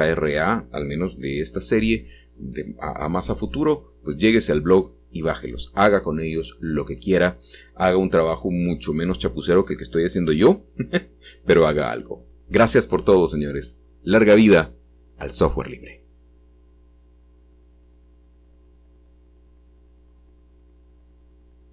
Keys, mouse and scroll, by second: 2.4-10.4 middle drag, 11.5 middle click, 13.1-15.1 shift+middle drag, 18.7 scroll down 1.